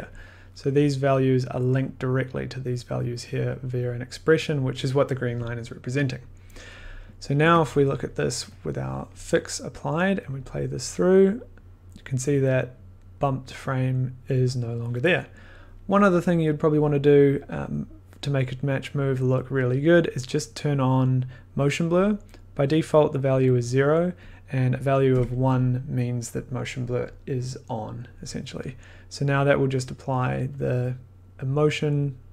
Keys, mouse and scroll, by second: 0.1 click, 0.1 click, 3.2 click, 7.2 click, 7.4 1, 8.4 click, 8.5 click, 8.5 click, 10.2 click, 16.7 click, 16.8 click, 16.9 click, 22.9 click, 24.3 click, 25.1 1, 25.5 click, 27.5-29.7 drag, 30.5 click.